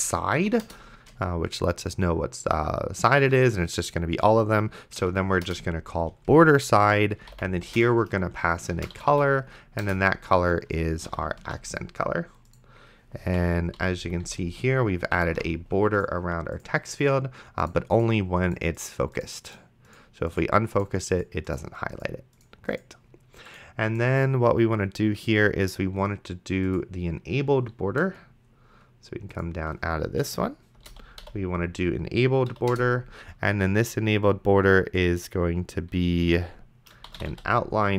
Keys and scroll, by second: 0.4 Down, 0.7 Return, 5.3 Down, 5.5 Return, 7.2 c, 7.6 o, 7.8 Return, 8.9 p, 9.8 Return, 11.1 ,, 11.7 ctrl+s, 13.4 Right, 13.8 ,, 14.0 Right, 14.3 ,, 15.6 ctrl+s, 30.9 e, 31.2 n, 32.5 Down, 32.7 Return, 37.3 t.